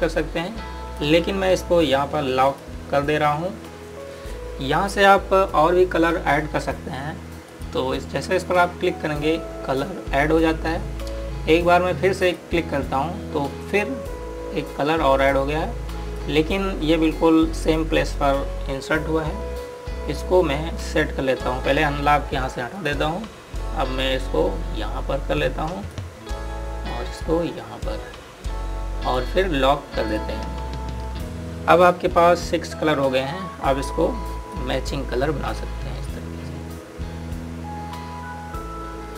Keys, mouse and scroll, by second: 8.2 click, 12.9 click, 16.1 click, 23.5 click, 32.4-33.2 scroll down 1, 33.4-34.0 scroll up 1, 35.3 click.